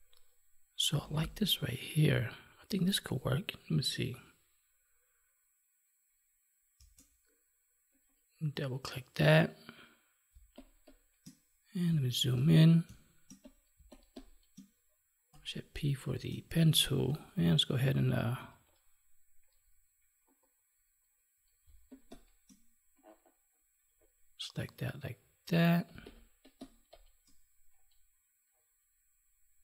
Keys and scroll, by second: 6.7 space, 10.3 space, 12.8 space, 16.0 space, 21.6 space, 25.8 space.